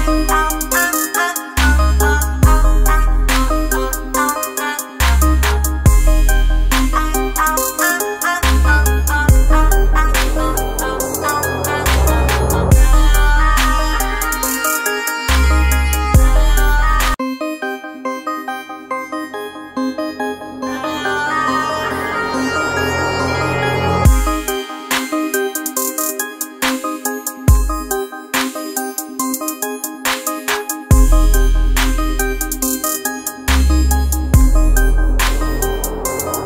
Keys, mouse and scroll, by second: 0.8 click, 2.8 ctrl+z, 4.5-7.5 drag, 7.5 alt+Up, 14.2-17.4 shift+drag, 23.1 click, 24.6 ctrl+a, 25.8 alt+Up, 28.8 click, 29.4 space, 29.6 click, 30.0 space, 30.3 ctrl+click, 36.0 Return.